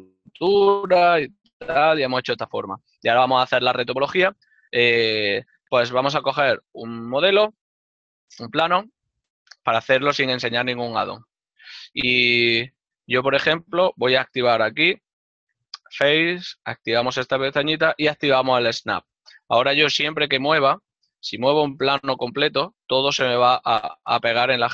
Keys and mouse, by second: 11.0 click, 11.1 right click, 11.8 g.